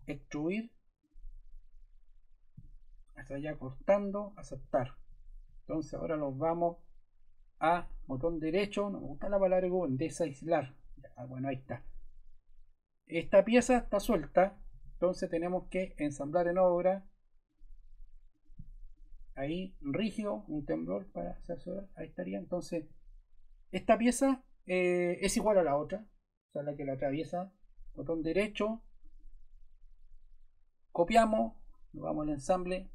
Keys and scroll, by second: 14.4 super+Caps_Lock, 14.6 super+z.